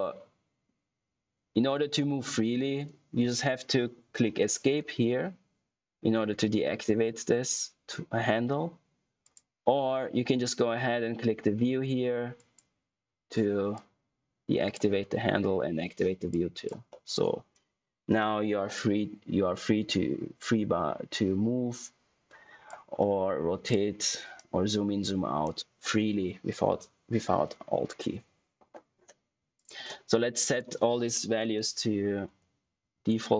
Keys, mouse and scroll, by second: 10.5 click, 12.3 click, 16.8 middle click, 19.0 click, 22.9 middle click, 23.6 click, 24.3 right click, 29.5 click, 32.2 Tab.